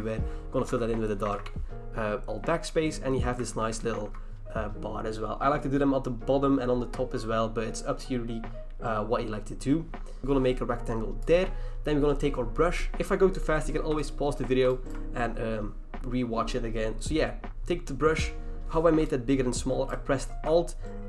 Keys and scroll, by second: 0.7 alt+BackSpace, 1.3 ctrl+d, 3.5 ctrl+h, 4.0 v.